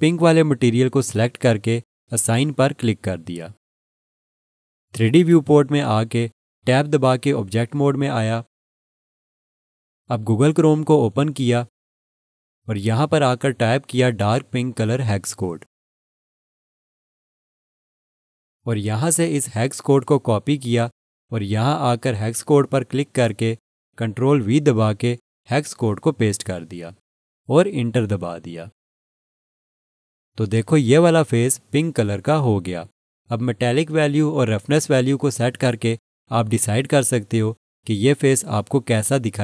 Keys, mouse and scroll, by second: 7.2 click, 12.0 click, 15.1-19.4 typing, 21.2 click, 22.1 right click, 22.9 click, 26.2 ctrl+v, 27.8 Return, 30.8 click, 34.5 click.